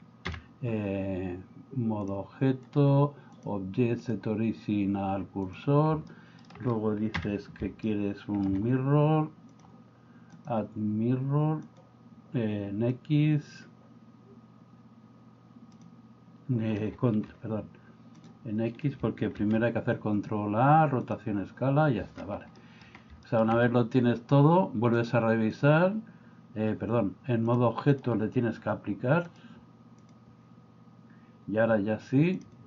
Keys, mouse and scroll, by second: 0.3 KP_1, 2.1-2.8 drag, 3.4-5.5 drag, 6.1 middle click, 7.1 KP_1, 7.9 shift+middle click, 9.5 click, 10.4-11.8 drag, 15.8 click, 19.4 ctrl+a, 22.6 middle click, 25.0 click, 27.5 click, 29.4-30.2 drag, 32.4 click.